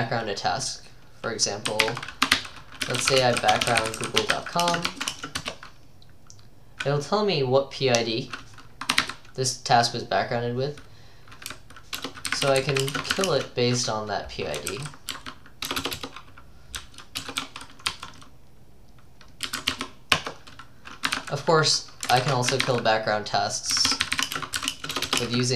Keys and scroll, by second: 1.8-5.1 typing, 5.4 Return, 9.0 typing, 11.5-17.9 typing, 19.2-25.5 typing.